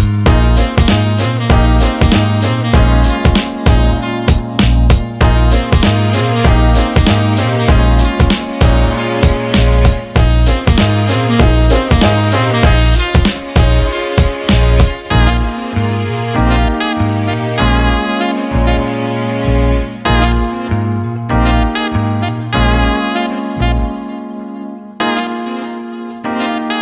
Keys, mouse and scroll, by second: 1.3 click, 1.7 alt+shift+middle click, 2.0 alt+middle click, 2.6 click, 3.5 alt+middle click, 3.7 alt+shift+middle click, 4.0 alt+middle click, 4.8 click, 5.5 click, 6.4-7.1 alt+middle drag, 7.3 alt+shift+middle click, 7.7 click, 12.0 click, 14.5 click, 16.1 alt+middle click, 17.6 click.